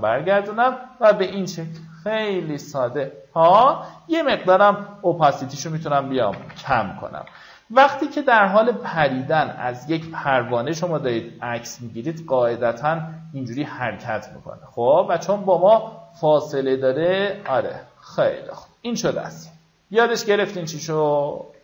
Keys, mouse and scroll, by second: 1.7 alt+scroll down 1, 2.3-3.1 alt+scroll down 3, 5.0 KP_6, 6.8 v, 7.7 KP_6, 10.1-10.7 alt+scroll up 1, 12.2-13.6 alt+drag, 15.3 click, 19.7 click.